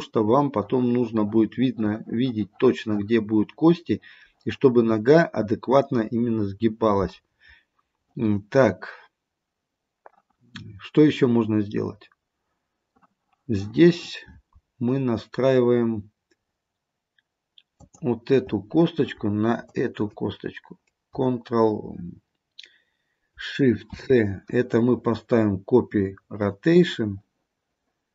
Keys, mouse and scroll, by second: 17.9 click, 19.7 shift+click, 24.0 ctrl+shift+c.